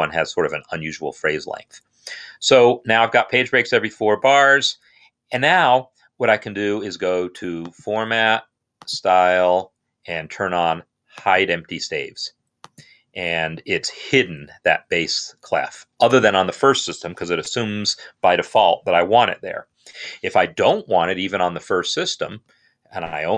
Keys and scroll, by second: 19.8 alt+f, 20.7 Right, 20.9 Right, 21.1 Right, 21.6 Right, 23.0 Right, 23.0 Down.